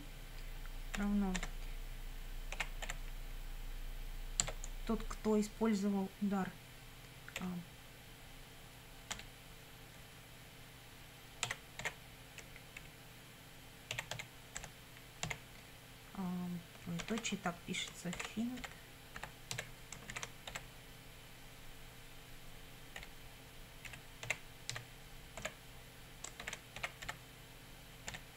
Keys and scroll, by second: 1.0 =, 1.4 space, 2.6 h, 2.9 i, 4.4 Tab, 7.4 ., 9.1 p, 11.5-15.2 typing, 17.0 shift+;, 18.2-20.5 typing, 23.0-28.1 typing.